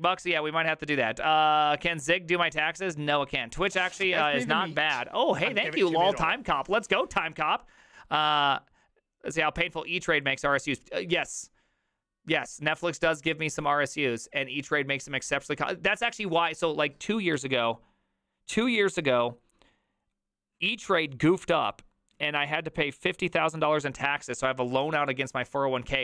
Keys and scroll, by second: 0.0 Right, 0.3 Right, 0.7 Right, 1.0 Escape.